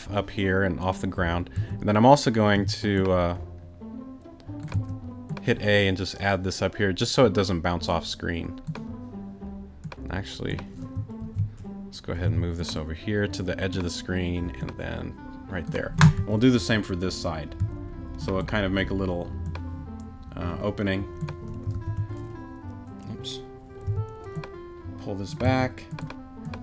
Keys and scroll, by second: 1.5 a, 2.5 t, 4.7 a, 11.2 super+z, 12.2 super+t, 16.2 a, 17.6 a, 21.7 super+z, 23.8 t, 25.4 a.